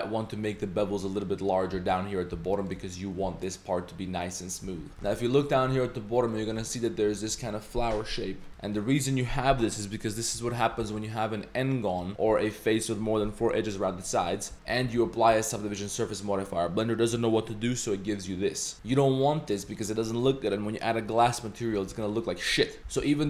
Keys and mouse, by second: 3.2 Tab, 4.3 middle drag, 4.7 Tab, 5.2 middle click, 6.6 Tab, 8.5 z, 8.6 middle click, 8.6 click, 10.4 z, 10.8 g, 14.5 z, 14.7 z, 15.0 z, 18.7 z, 18.9 Tab, 21.7 q, 22.8 Tab, 22.8 2, 22.8 z, 22.8 ctrl+b.